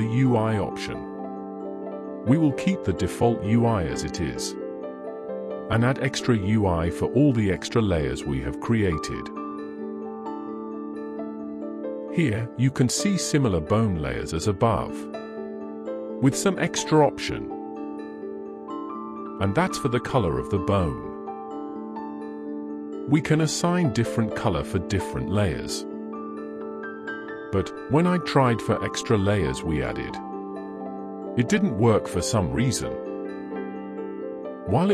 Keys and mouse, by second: 0.7 click, 3.6 click.